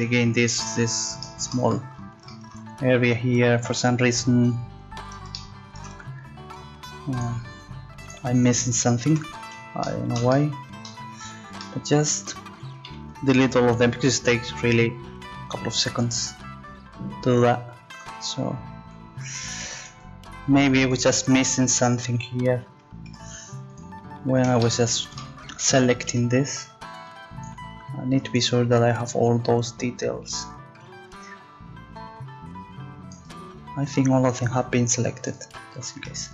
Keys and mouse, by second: 3.7 a, 9.1 z, 12.8 c, 19.8-22.6 drag, 23.1 x, 26.1 c, 27.5-29.3 drag.